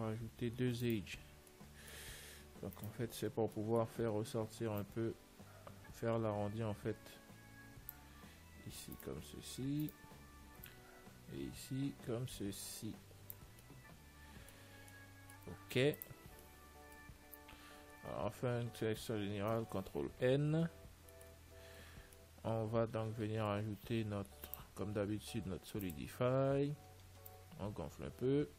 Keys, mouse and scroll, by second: 1.1-2.8 right drag, 1.8-3.6 middle drag, 3.1-4.9 right drag, 3.9-6.8 middle drag, 5.1 click, 9.3-11.9 right drag, 11.0 click, 13.8-19.7 middle drag, 16.1 ctrl+s, 18.2 a, 19.8 ctrl+n, 21.0 a, 21.4-24.3 middle drag, 21.7 Tab, 24.8 click, 27.6 click.